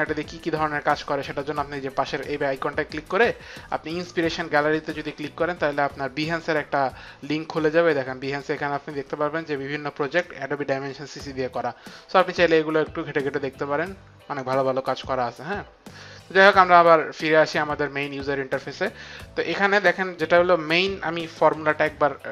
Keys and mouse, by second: 1.2 click, 4.0 click, 16.7 click, 19.5 click.